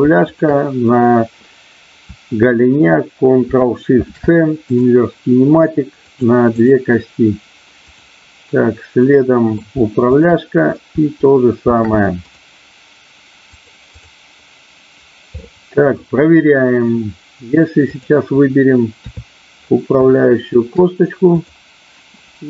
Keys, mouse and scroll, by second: 0.3-1.4 shift+drag, 3.9 ctrl+shift+c, 6.2 click, 7.8-8.9 drag, 8.9 middle click, 10.1-11.1 shift+drag, 11.6 ctrl+shift+c, 13.6 click, 15.4 middle click, 17.8-18.9 drag, 18.9 KP_3, 20.1 shift+middle click.